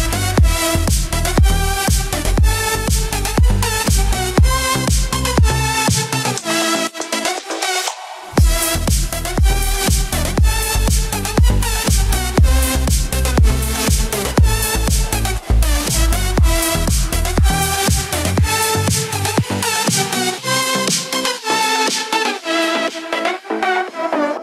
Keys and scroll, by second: 23.8 ctrl+=.